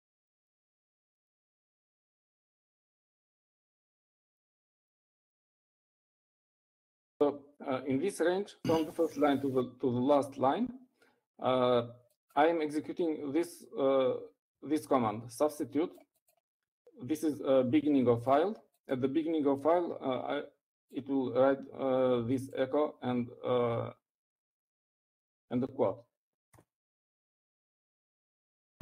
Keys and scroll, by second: 0.0-1.0 typing, 2.3 typing, 3.7-7.3 typing.